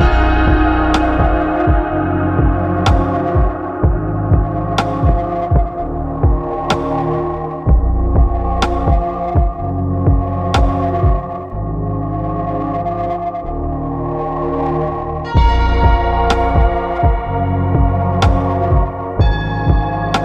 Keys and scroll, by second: 0.3 ctrl+Up, 3.0 ctrl+Up, 5.2 ctrl+Up, 7.8 ctrl+Up, 10.3 ctrl+Up, 12.2 ctrl+Up, 13.9 ctrl+v, 14.3 ctrl+v, 15.3 Escape, 19.2 ctrl+Up.